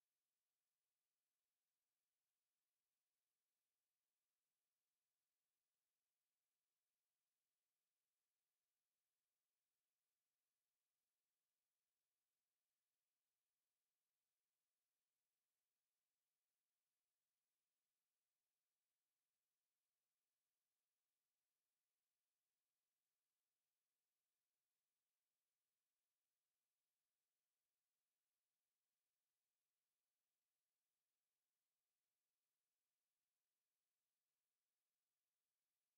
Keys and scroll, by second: 28.2 ctrl+x, 29.6 ctrl+v, 30.1 ctrl+a.